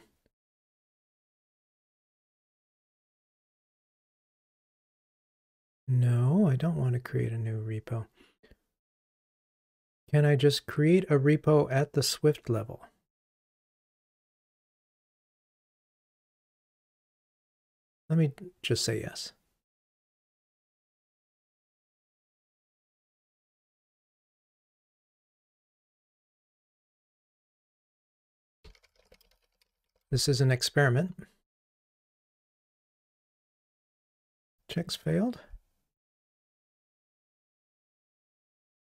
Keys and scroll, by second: 23.7 super+k.